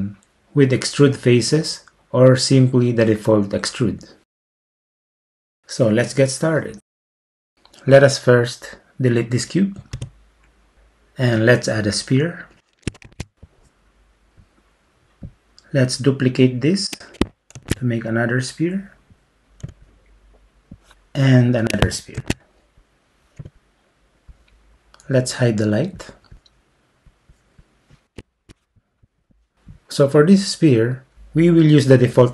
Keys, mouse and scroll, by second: 10.0 x, 13.1 shift+a, 17.6 shift+d, 22.2 shift+d, 23.4 y, 24.3 click, 27.1-28.2 drag, 29.3-32.0 drag.